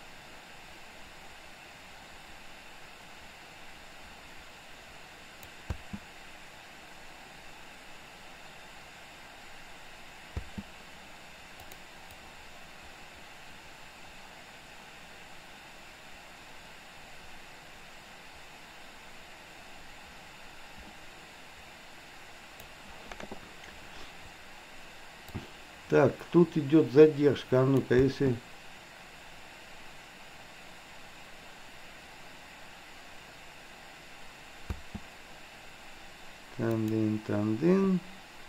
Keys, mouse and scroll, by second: 5.8 space, 10.3 space, 11.7 click, 12.3-22.8 drag, 25.4-27.9 drag, 28.2 space, 34.8 space, 36.8 click.